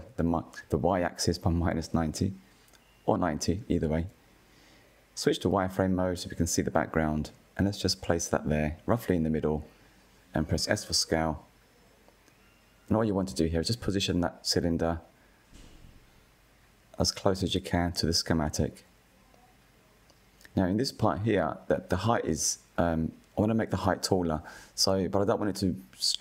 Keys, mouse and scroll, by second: 4.1 scroll up 2, 4.8 click, 9.4 s, 13.8 click, 17.0-18.0 scroll up 1, 18.0-21.7 shift+middle drag, 21.7 s, 26.1 middle drag.